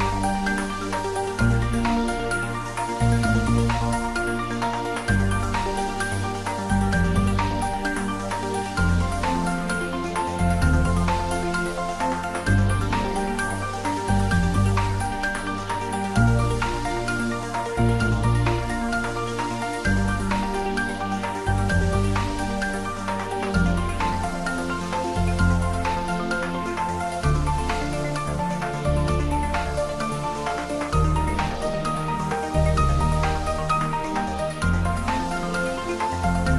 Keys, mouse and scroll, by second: 0.0 z, 0.3 click, 0.6 g, 0.8 z, 2.8 click, 3.2 s, 4.3 click, 5.6 scroll up 1, 6.4 s, 6.7 x, 7.5 click, 8.0 r, 9.4 click, 9.7 s, 10.9 click, 11.3 g, 12.7 click, 13.4 r, 13.8 click, 14.1 scroll down 1, 14.6 middle click, 15.6 scroll up 1, 16.2 click, 16.9 scroll up 1, 17.9-18.3 scroll down 1, 18.3-20.0 middle drag.